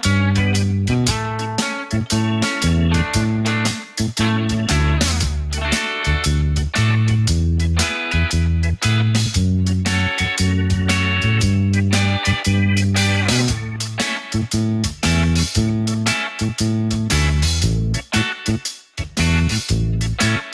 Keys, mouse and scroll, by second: 1.1 ctrl+b, 2.8 ctrl+z, 3.8 click, 4.5 click, 5.4 shift+click, 6.6 ctrl+b, 8.7 Tab, 10.0 click, 12.2 Tab, 13.5 click, 14.5 click, 15.7 shift+click, 16.7 click, 18.6 shift+click, 18.9 scroll down 1, 20.3 click.